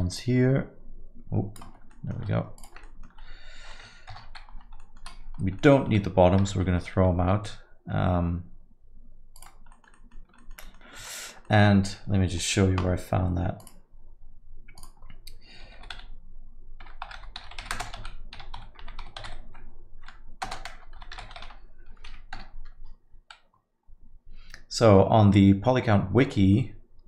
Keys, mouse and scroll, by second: 0.1 shift+click, 1.4 shift+click, 1.9 middle click, 2.5 shift+click, 2.8 alt+middle click, 4.1 ctrl+KP_Add, 4.8 alt+middle click, 5.3-5.7 scroll down 2, 5.6 alt+middle click, 6.4 x, 9.7 alt+middle click, 9.9 middle click, 10.1 scroll down 2, 10.4 alt+middle click, 10.6 middle click, 11.0 Tab, 11.1 alt+middle click, 11.4 middle click.